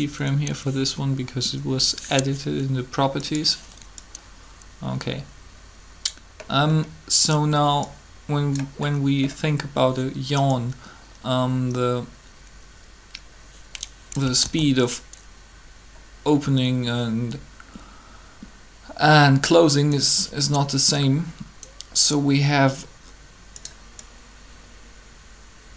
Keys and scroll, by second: 14.3 alt+a.